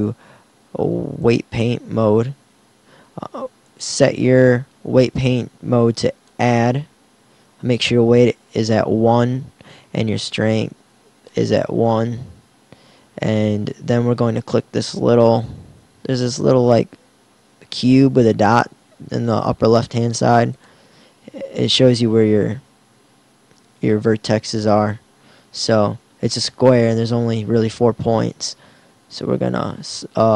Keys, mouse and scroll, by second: 2.4-5.5 middle drag, 10.2-11.8 drag, 11.8 middle click, 20.3-22.4 drag.